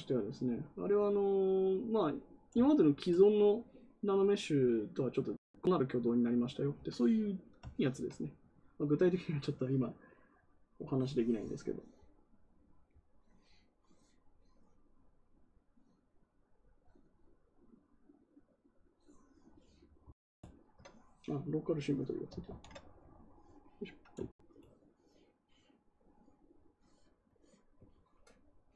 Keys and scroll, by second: 22.4 ctrl+z.